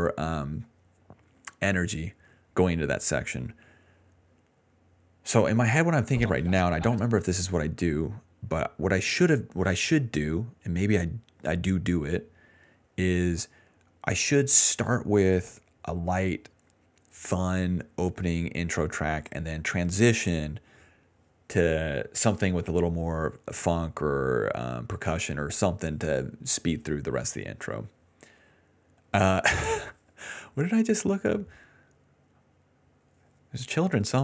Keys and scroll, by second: 6.0 space, 7.0 space, 16.0-16.8 typing.